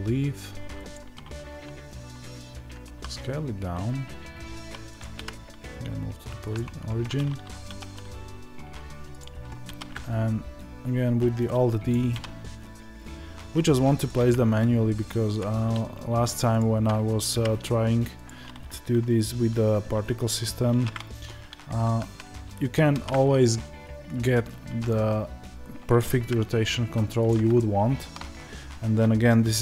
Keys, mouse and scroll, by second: 9.6 alt+d, 11.8 click, 17.2 g, 20.6 alt+r, 24.1 click, 25.9 click, 27.5-29.6 shift+middle drag.